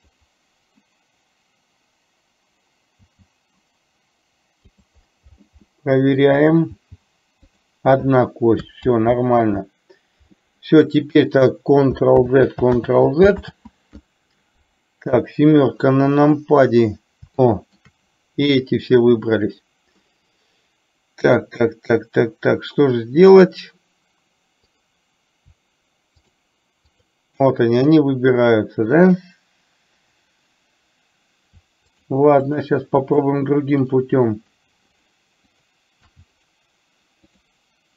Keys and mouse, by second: 3.1 g, 5.8 middle click, 8.8 ctrl+z, 12.2 ctrl+z, 15.1 KP_7, 17.6 shift+middle click, 26.3 shift+click, 27.0 shift+click, 32.0 shift+click, 32.6 shift+click, 33.0 shift+click, 35.6 shift+click, 36.3 shift+click.